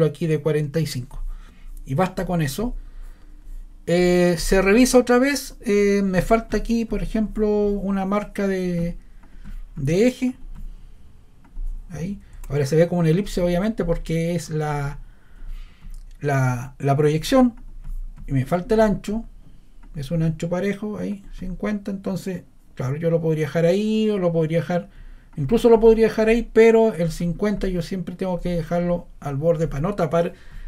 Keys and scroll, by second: 12.3 ⟲.